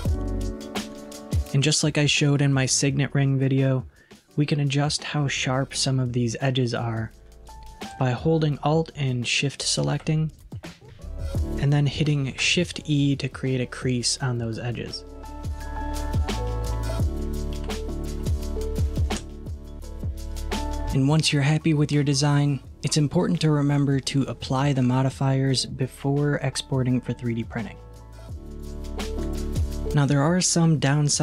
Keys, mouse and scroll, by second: 7.5 click, 8.5 alt+click, 9.7 alt+shift+click, 12.4 shift+e, 20.3 click, 27.4-29.6 drag, 29.6 middle click.